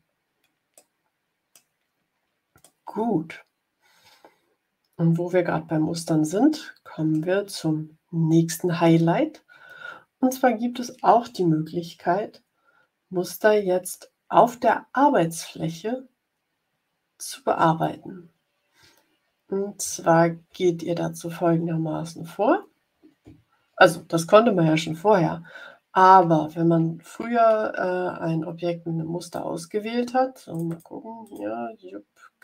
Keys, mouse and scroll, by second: 0.7 click, 2.5-7.1 middle drag, 7.1 click, 29.1 click, 30.4 click, 31.1 click.